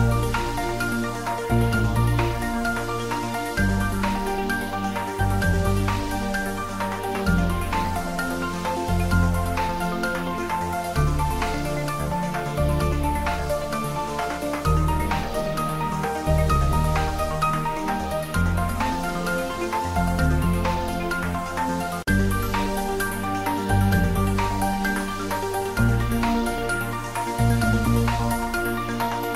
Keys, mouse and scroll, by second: 3.1 click, 5.1-7.2 scroll down 1, 7.2 click, 9.0 ctrl+s, 9.8 ctrl+middle click, 10.8-11.2 ctrl+middle click, 11.2-11.5 shift+middle click, 11.6 ctrl+middle click, 12.4 click, 13.2 Tab, 13.4 click, 14.0 ctrl+z, 15.5 click, 17.2 click, 20.7 Tab, 22.0 Tab, 23.1 click, 25.1 click.